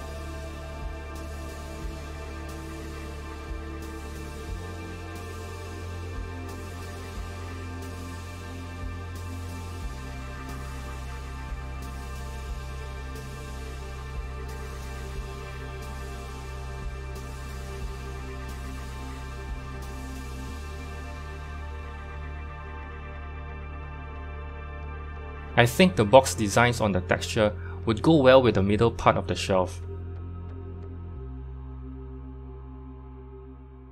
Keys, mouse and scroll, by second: 0.6 click, 2.4 s, 8.4 g, 9.6 s, 14.6 g, 20.4 z, 24.7 click, 28.8 click, 32.4 u, 33.8 click.